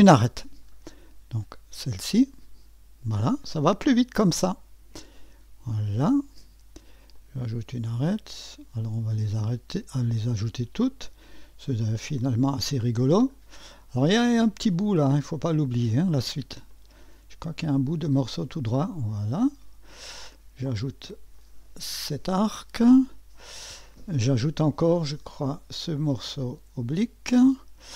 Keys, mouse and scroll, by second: 0.0 click, 2.0-4.7 drag, 5.2 click, 7.1 click, 8.5 click, 10.7 click, 12.1 click, 13.3-13.7 scroll up 1, 14.5-15.8 drag, 16.7 click, 18.4 click, 20.2 click, 21.4 click, 24.3 click, 26.3 click.